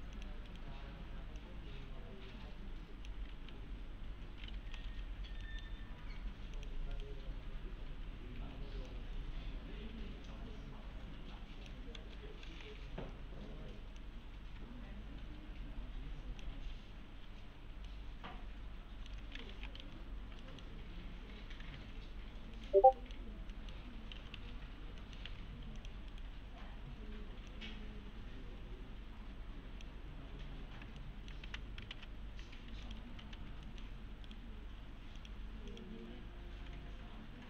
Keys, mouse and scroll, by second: 0.1 click, 0.5 right click, 1.4-3.3 click, 4.4-5.4 typing, 5.1 scroll down 1, 5.4 middle click, 5.8 scroll up 1, 6.0 alt+1, 6.6 click, 6.9 right click, 7.9-8.4 typing, 8.9-10.7 click, 12.0 alt+x, 14.0-16.5 click, 17.9-19.1 alt+middle click, 19.3-20.3 typing, 20.1-20.4 scroll down 1, 20.4 middle click, 20.8-21.4 scroll up 1, 21.8 alt+1, 22.6 right click, 23.0 middle click, 23.9-24.9 typing, 25.0 middle click, 25.3 alt+1, 25.8 click, 26.1 right click, 27.5-30.0 click, 30.4 scroll down 1, 31.0-31.6 alt+middle click, 31.5 2, 31.9 ctrl+v, 32.8 click, 33.0-33.9 typing, 33.7 middle click, 34.3 right click, 35.2 click.